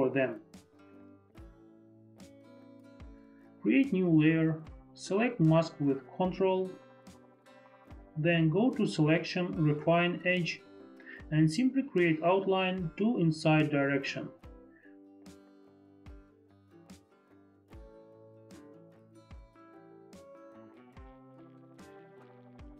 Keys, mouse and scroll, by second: 3.1 click, 5.4 F4, 6.5 ctrl+click, 14.1 click, 15.4 Escape, 16.7 Escape, 19.6 click, 20.9 click.